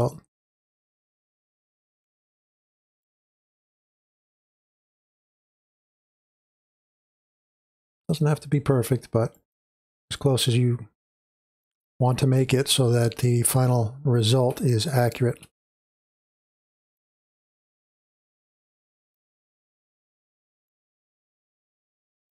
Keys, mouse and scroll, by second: 4.3-10.4 drag, 11.5-12.5 drag, 12.5-13.0 scroll down 2, 13.0 space, 14.1 click, 14.1-14.6 scroll up 2, 14.6 space, 14.7-22.3 drag.